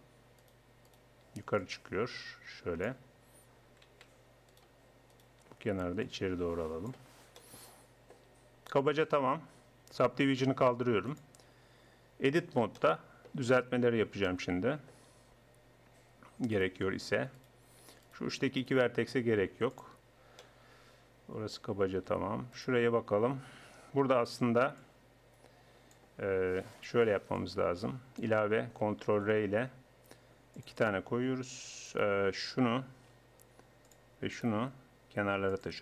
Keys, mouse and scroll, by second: 0.9-2.6 right drag, 1.7-3.3 drag, 4.5-6.9 right drag, 6.1-7.1 drag, 7.1 right click, 7.4 click, 9.9 Tab, 11.7 Tab, 12.6 click, 14.4 middle click, 16.5-19.4 right drag, 19.4 x, 22.5-27.3 drag, 27.3-28.7 middle drag, 28.7 click, 29.1 ctrl+r, 31.9 click, 32.7-33.7 right drag, 33.1 g, 34.3-35.5 right drag, 34.5 g.